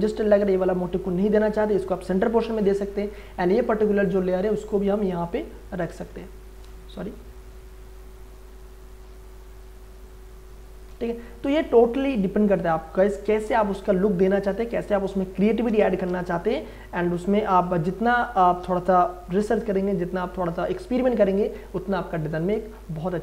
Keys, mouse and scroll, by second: 3.3-4.0 scroll up 1, 4.0 click, 5.9 ctrl+z, 6.5 click, 6.9 ctrl+t, 7.3-10.7 drag, 10.7 Return, 12.2-14.7 drag, 15.2 space, 15.5 ctrl+click, 16.0 ctrl+t, 16.5 right click, 17.5 click, 19.3 Return, 22.8 space, 23.1 ctrl+click.